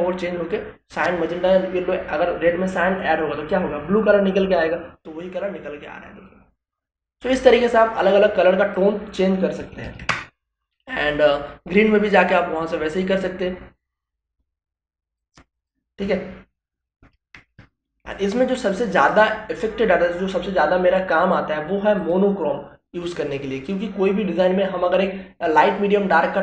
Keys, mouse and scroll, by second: 7.8 click, 10.2-14.8 drag, 16.3 BackSpace, 17.4 click, 21.3 click.